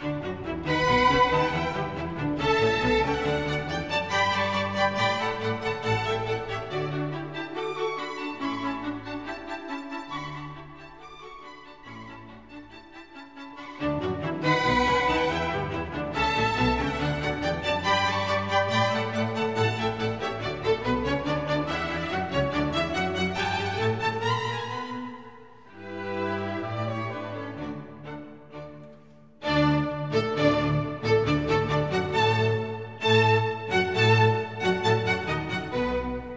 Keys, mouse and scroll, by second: 1.1 r, 4.3 click, 8.4 shift+a, 11.5 s, 14.0 click, 17.4 shift+a, 23.0 KP_0, 24.5 click, 25.3 click, 27.8 n, 29.0 click, 29.9 n, 33.9 click, 35.1 click, 36.1 click.